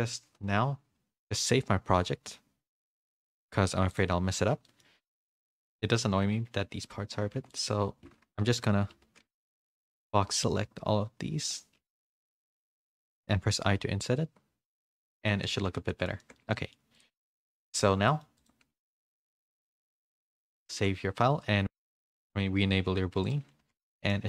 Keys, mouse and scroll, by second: 2.9-4.0 drag, 4.6 middle click, 5.1 click, 5.3 Tab, 5.3 middle click, 7.0 Tab, 7.3 3, 8.4 KP_3, 9.0 z, 9.5 b, 11.7 z, 12.1 shift+middle click, 12.4 middle click, 14.1 i, 15.2 Tab, 15.4 a, 15.9 middle click, 15.9 a, 16.1 shift+middle click, 16.5 middle click, 16.9 click, 17.3 shift+middle click, 17.7 click, 18.0 middle click, 18.3 click, 20.7 ctrl+s, 22.0 click, 23.2 click, 23.8 middle click, 23.8 h.